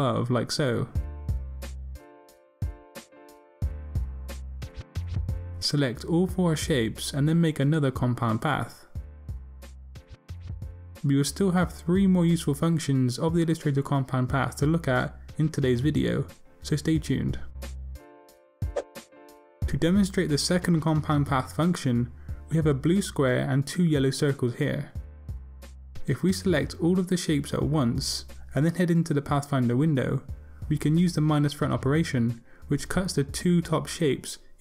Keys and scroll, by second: 4.3 super+v.